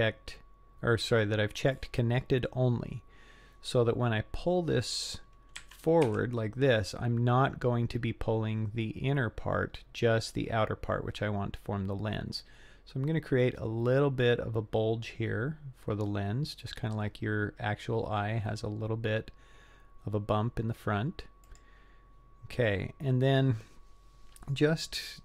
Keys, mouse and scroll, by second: 5.6 g.